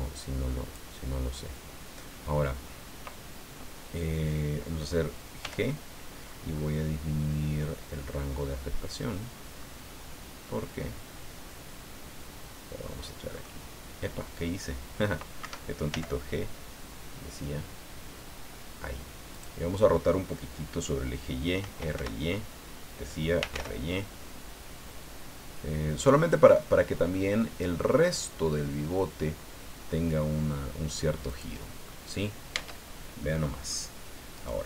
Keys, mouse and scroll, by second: 5.4 g, 6.3-7.0 scroll up 2, 7.1 scroll up 2, 8.3-8.6 scroll up 2, 9.6-10.0 scroll up 2, 13.3-13.6 scroll up 2, 15.4 Escape, 15.9 g, 19.3 click, 21.6 r, 21.9 y, 23.1-24.0 typing, 26.3 scroll up 2, 26.6-28.0 scroll down 8, 28.5 scroll down 2, 31.3 click, 31.8 scroll down 2, 32.5 Tab, 33.2 middle click, 34.3 right click.